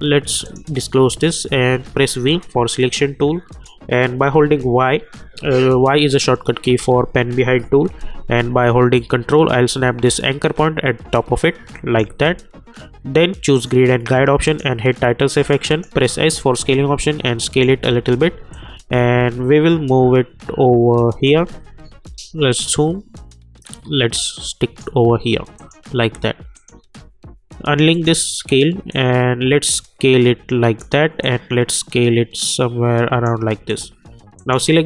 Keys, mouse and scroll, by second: 0.4 click, 1.7 v, 2.2-4.3 drag, 4.3 y, 8.9-13.4 drag, 16.0 s, 16.5-17.8 drag, 17.8 v, 18.5-21.6 drag, 21.6-22.3 alt+scroll up 1, 22.5-33.6 drag.